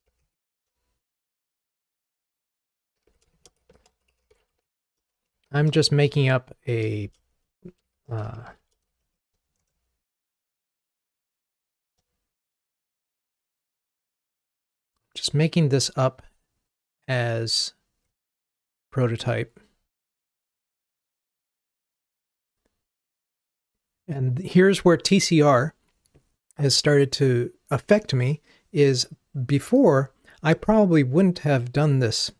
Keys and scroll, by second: 18.5 ctrl+r.